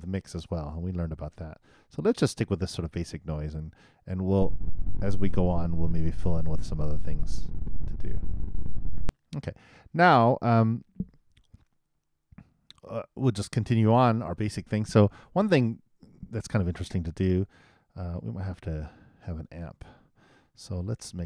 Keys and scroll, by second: 4.3 super+Return, 9.0 super+..